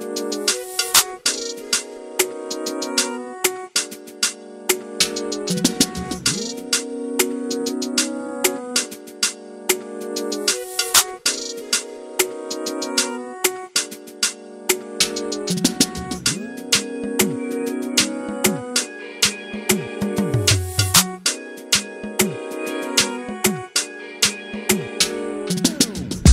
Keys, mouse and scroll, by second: 0.0 scroll down 1, 0.1 shift+middle click, 0.3 scroll up 1, 0.5 click, 0.7 shift+click, 0.8 scroll down 1, 0.8 middle click, 1.1 shift+click, 1.3 shift+click, 1.4 Tab, 1.7 a, 1.8 s, 2.7 scroll down 2, 2.8 shift+middle click, 3.0 scroll up 2, 3.1 scroll down 1, 3.2-4.9 middle drag, 4.9 click, 5.3 scroll down 2, 5.4 middle click, 5.7 Tab, 6.0 alt+a, 6.1 scroll down 1, 6.2 shift+middle click, 6.3 scroll up 2, 6.4 middle click, 6.6 scroll down 1, 6.8 shift+middle click, 7.4 click, 7.5 scroll down 1, 7.8 KP_1, 8.1 shift+middle click, 8.2 scroll down 2, 8.3-8.8 scroll up 4, 8.8 scroll down 1, 9.1 Tab, 9.4 shift+middle click, 10.0 click, 10.1 alt+z, 10.5 click, 10.8 alt+z, 12.3 ctrl+i, 13.4 scroll down 1, 13.5 shift+middle click, 13.7 scroll up 2, 13.8 alt+z, 14.7 click, 15.2 ctrl+z, 15.6 ctrl+shift+click, 15.9 ctrl+z, 16.2 ctrl+click, 17.3 alt+z, 17.5 scroll up 1, 17.6 scroll down 1, 18.2-19.6 drag, 19.6 Tab, 19.7 alt+a, 23.3 click, 23.9-24.2 scroll up 1, 24.7 scroll down 1, 24.9 middle click, 25.3-25.6 scroll down 1.